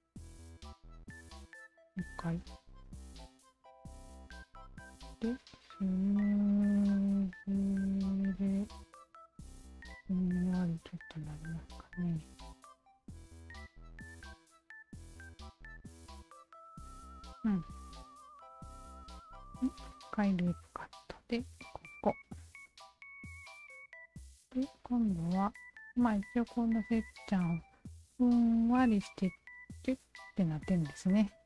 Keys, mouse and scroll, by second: 1.7 ctrl+z, 3.2 click, 5.7-13.3 drag, 13.9 ctrl+z, 15.0-16.3 alt+drag, 16.6 shift+z, 17.5 alt+click, 18.8 shift+q, 19.9 alt+click, 21.6 alt+click, 22.7-24.8 alt+drag, 31.1 alt+click.